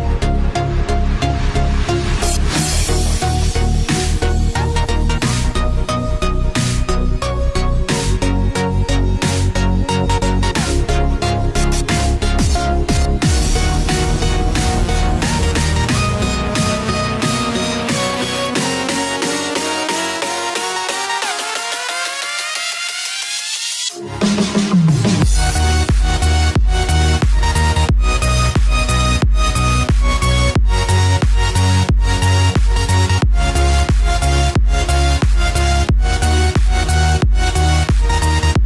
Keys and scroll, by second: 0.0-1.0 typing, 3.4 ctrl+s, 9.5-12.0 typing, 12.2 Return, 12.6 F5, 19.5 Return, 19.8-23.9 typing, 20.5 Return, 25.0 ctrl+v, 25.9-33.3 typing, 32.9 Left, 35.2 1.